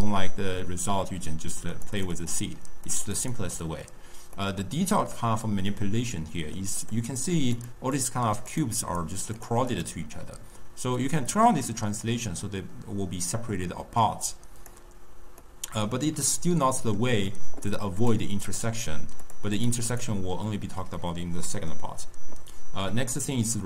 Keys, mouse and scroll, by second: 1.6-4.3 drag, 4.3-6.7 middle drag, 6.7 click, 7.4 click, 7.8 click, 8.4 click, 8.8 click, 9.2 click, 9.6 click, 10.9-14.0 drag, 15.3-17.9 middle drag, 17.9 click, 18.4 click, 19.1 click, 19.5 click, 19.8 click, 20.9-21.7 middle drag, 21.7-23.2 scroll down 2, 23.2-23.6 drag.